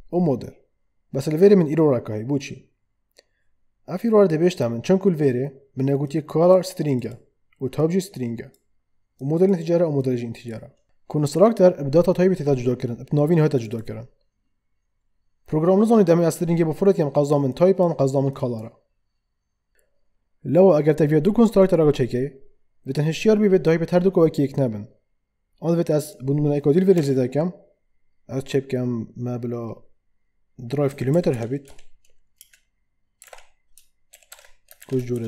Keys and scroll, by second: 26.9 ,, 30.6-35.2 typing.